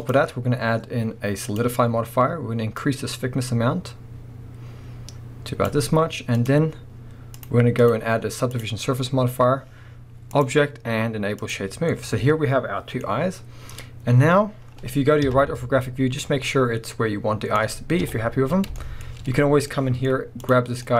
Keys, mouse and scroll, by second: 0.0-6.5 drag, 7.4-11.9 drag, 11.9-13.0 middle drag, 14.3-15.3 scroll down 1, 15.3 KP_3, 15.8-16.5 scroll up 1, 16.5 middle click, 18.0 KP_1, 18.8 shift+middle click, 19.0 scroll up 1, 19.5-20.4 middle drag, 19.5 scroll down 2, 20.0-20.4 scroll up 2, 20.4 click, 20.7 scroll down 2, 20.9 middle click.